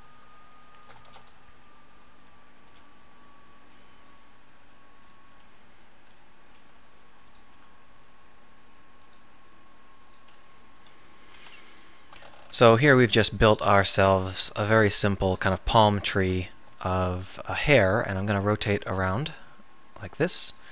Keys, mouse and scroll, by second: 1.1 shift+d, 2.7 r, 4.0 g, 6.8 g, 7.5 r, 9.2 click, 9.2 g, 11.4 KP_7, 16.9 shift+d, 17.6 r.